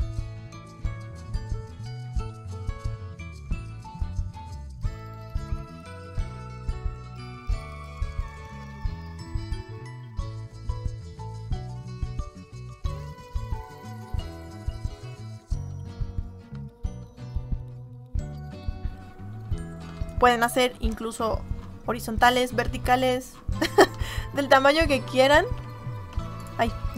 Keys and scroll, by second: 8.7 m, 25.5 ctrl+z.